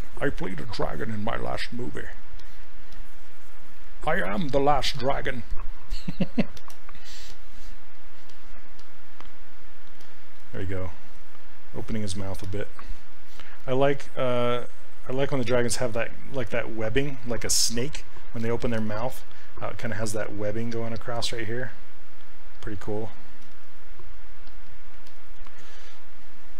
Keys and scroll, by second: 13.1 s, 14.2 s, 24.4 s.